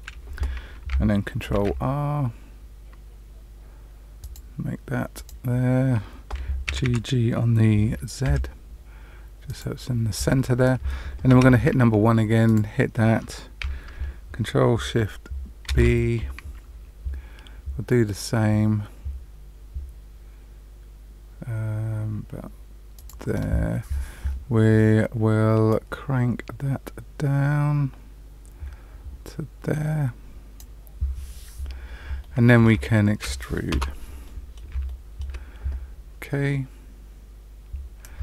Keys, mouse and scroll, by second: 1.5 ctrl+r, 6.6 g, 11.3 1, 12.4 click, 15.6 ctrl+shift+b, 25.6 click, 32.1 middle click, 32.8 shift+middle click, 33.7 Return, 34.2 middle click, 34.8 middle click.